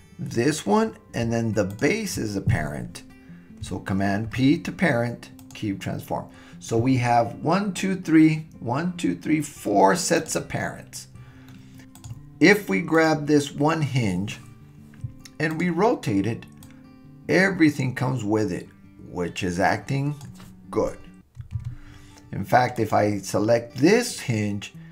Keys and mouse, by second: 1.7 shift+click, 4.3 super+p, 10.2 click, 11.5-11.8 middle drag, 12.0 click, 13.0 click, 15.5 click, 16.6-20.2 drag, 21.6 super+z, 22.8 click.